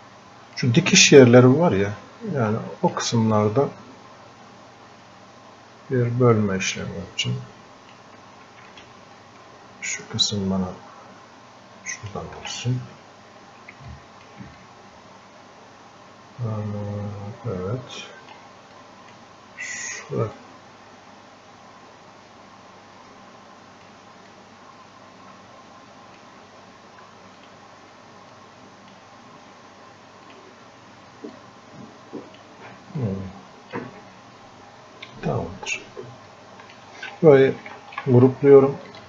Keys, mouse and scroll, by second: 1.2 scroll up 1, 1.7 scroll down 1, 2.5 alt+click, 3.3-6.9 drag, 6.9-8.7 drag, 8.7-12.9 ctrl+alt+shift+drag, 12.9 scroll up 1, 13.9 alt+click, 14.6-18.8 drag, 18.8-20.4 drag, 20.4-24.3 drag, 24.3-33.1 drag, 33.1 alt+click, 34.2-36.3 drag, 36.3-37.7 alt+drag, 37.7 ctrl+w, 38.9 ctrl+shift+click.